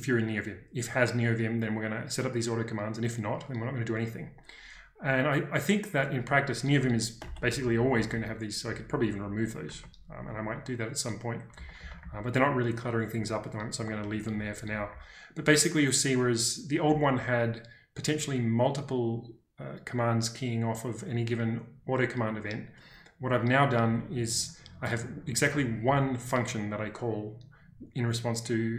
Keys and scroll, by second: 6.1 Escape, 6.5-8.5 typing, 9.6 Escape, 11.5 k, 13.0-14.7 typing, 25.4 w, 25.8 w.